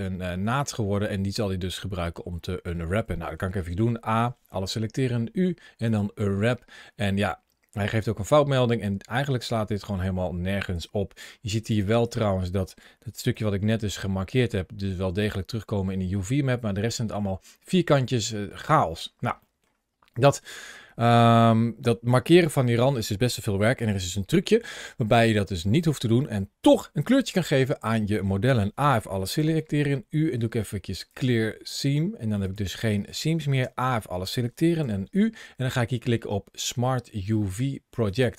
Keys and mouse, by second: 2.3 middle click, 3.0 middle click, 3.5 a, 4.8 u, 8.6-9.8 middle drag, 10.6 click, 11.6 click, 13.1 l, 14.3 middle click, 16.3 middle click, 18.1 middle click, 19.3 middle click, 20.0 middle click, 26.3 middle click, 28.3 a, 29.2 u, 32.3 click, 32.6 middle click, 33.5 a, 34.6 u.